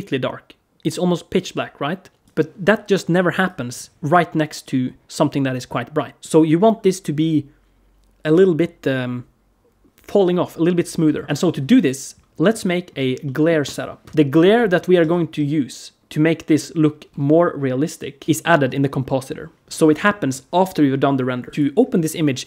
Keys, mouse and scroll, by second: 21.5 click.